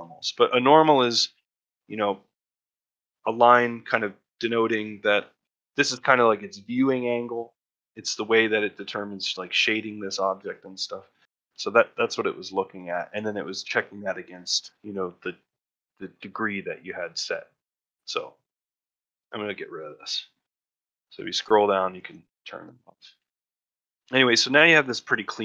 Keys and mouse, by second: 0.1 ctrl+middle click, 0.5 shift+middle click, 1.3 shift+middle click, 1.6 ctrl+middle click, 4.6 middle click, 5.1 ctrl+middle click, 7.2 middle click, 7.9 middle click, 8.5 shift+middle click, 10.3 ctrl+middle click, 10.6 click, 11.0 shift+middle click, 11.2 ctrl+middle click, 11.5 shift+middle click, 11.8 middle click, 12.7 shift+middle click, 17.9 middle click, 18.8-22.6 drag, 22.7 middle click, 23.1 shift+middle click, 23.4 ctrl+middle click, 23.6 middle click, 24.0 shift+middle click, 24.2 middle click, 24.6 middle click, 24.9 middle click.